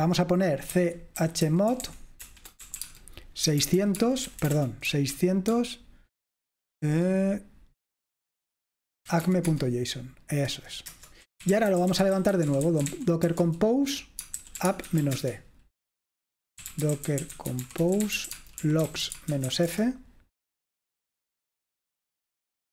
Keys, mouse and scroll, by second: 1.0-5.6 typing, 8.9-9.8 typing, 11.0 Return, 11.2-20.0 typing, 22.3-22.7 typing.